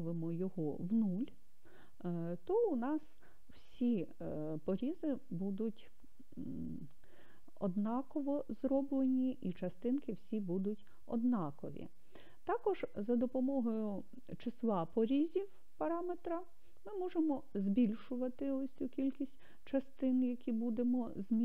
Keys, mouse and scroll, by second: 17.2 click.